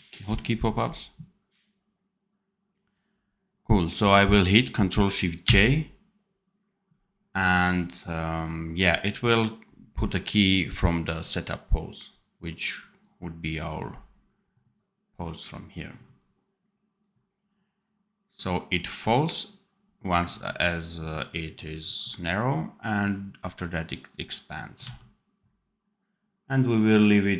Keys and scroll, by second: 5.4 ctrl+shift+j, 24.7 d.